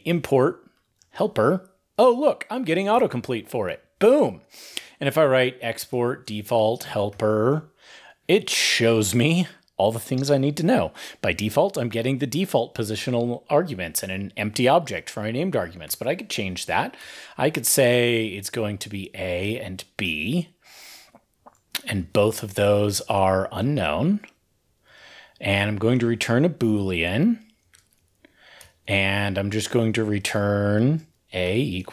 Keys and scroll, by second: 3.4 ctrl+n, 3.4 ctrl+e, 21.1 ctrl+f, 24.7 ctrl+f, 25.2 ctrl+f.